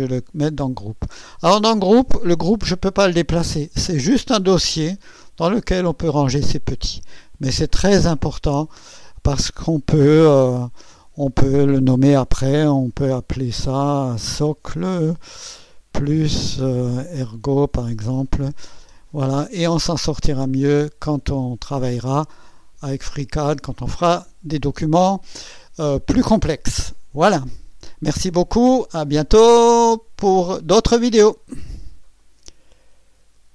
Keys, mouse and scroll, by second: 2.5 click, 5.2 click, 9.4 click, 11.0 F2, 13.9-19.6 typing, 16.5 KP_Add, 20.5 click, 32.3 right click.